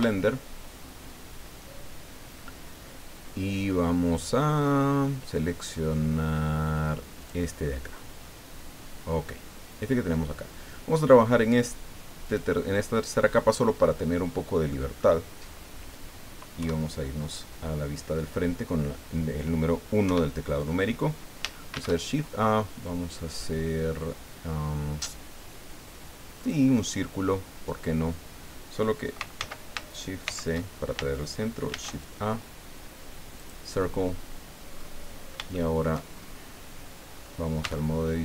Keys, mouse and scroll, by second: 7.2 click, 9.5 scroll down 1, 12.2 click, 13.8 middle click, 14.7 middle click, 15.5 scroll up 1, 16.6 KP_1, 20.0 KP_1, 21.7 shift+a, 26.4 click, 29.4 ctrl+z, 30.2 shift+c, 31.7 shift+a, 33.4 click, 34.7-35.1 scroll up 2, 35.1-35.4 scroll down 3, 35.5 shift+click, 36.1 shift+scroll up 2, 37.1 scroll up 2, 37.6 Tab.